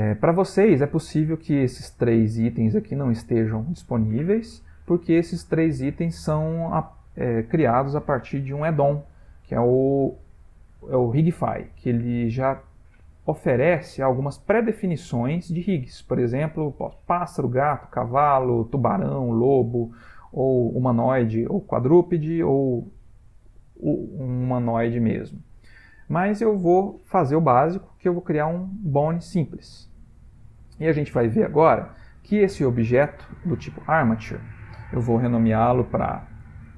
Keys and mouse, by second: 26.9 shift+a, 29.6 ctrl+middle click, 29.8 ctrl+middle click, 30.3 middle click, 31.5 ctrl+middle click, 35.7 F2.